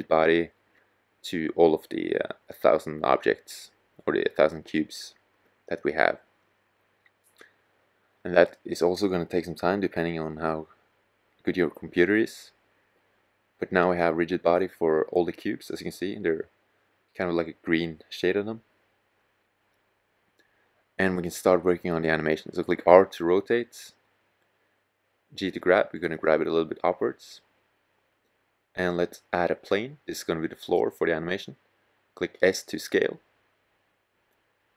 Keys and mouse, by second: 21.4 r, 23.2-24.5 drag, 24.5 g, 28.2-30.9 drag, 30.9 s, 33.9 click.